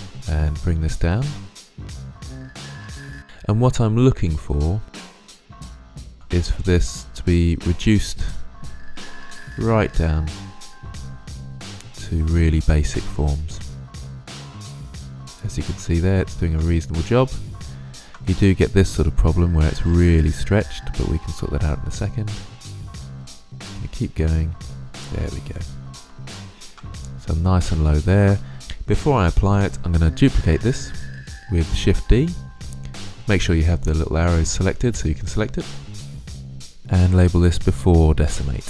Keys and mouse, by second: 0.3-1.7 drag, 1.9-3.0 drag, 4.1-5.3 middle drag, 5.8 middle click, 8.9-12.9 drag, 12.9-14.1 middle drag, 14.4 middle drag, 17.4-19.2 middle drag, 19.6-21.5 middle drag, 22.3-24.3 middle drag, 25.0-26.5 middle drag, 27.4-28.5 middle drag, 35.7 click, 35.9 BackSpace.